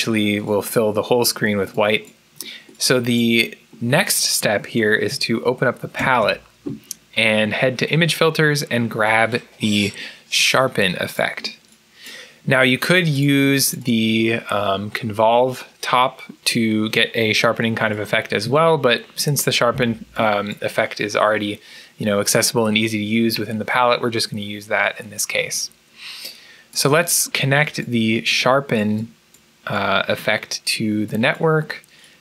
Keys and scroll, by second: 5.8 ctrl+b, 18.3 Escape.